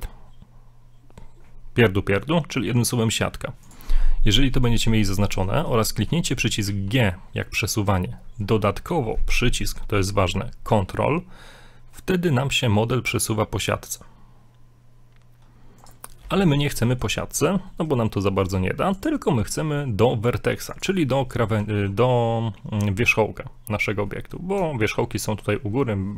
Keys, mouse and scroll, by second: 4.6 scroll down 3, 4.8 middle click, 5.2 shift+middle click, 5.6 scroll up 1, 6.7 g, 10.7-12.7 drag, 16.6 middle click, 16.9 shift+middle click, 17.1-17.5 scroll up 2, 17.7 middle click, 19.0 click, 24.1 middle click, 24.4 scroll up 2, 24.7 shift+middle click.